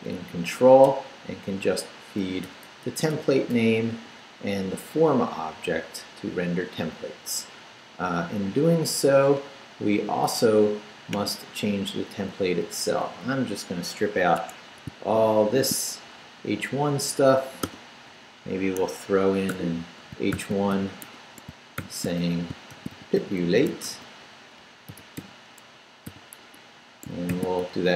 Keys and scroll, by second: 0.8 BackSpace, 2.4 BackSpace, 12.1 Up, 12.7 Up, 13.3 Up, 14.4 Escape, 14.9 shift+Escape, 15.4 shift+v, 15.8 shift+Down, 16.6 Down, 17.6 d, 18.1 Up, 18.8 Escape, 19.5-27.8 typing.